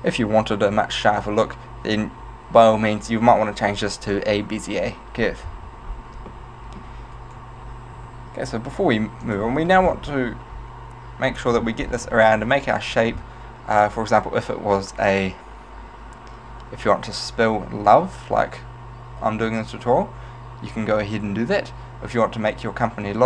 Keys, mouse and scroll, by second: 6.0-6.4 scroll up 2, 6.4 shift+middle click, 7.2 right click, 8.1 g, 9.4 click, 10.0-10.9 scroll down 3, 12.0-13.0 scroll down 4, 13.0-14.2 scroll down 2.